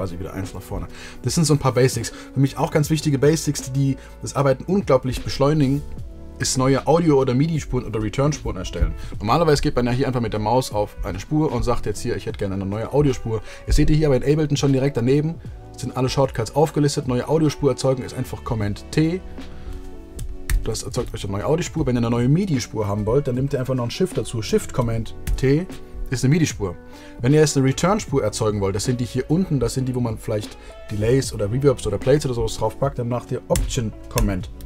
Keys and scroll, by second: 24.8 shift+super+t, 34.2 alt+super+t.